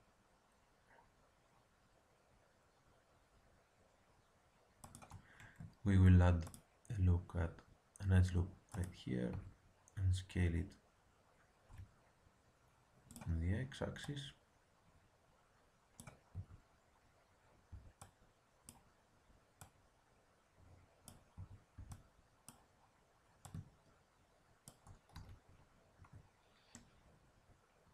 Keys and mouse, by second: 5.8 ctrl+r, 9.3 s, 14.0-15.8 drag, 16.2 a, 17.6 b, 19.5-21.4 drag, 21.3 a, 21.7 b, 23.4-25.2 drag, 25.1 z, 25.9 Tab.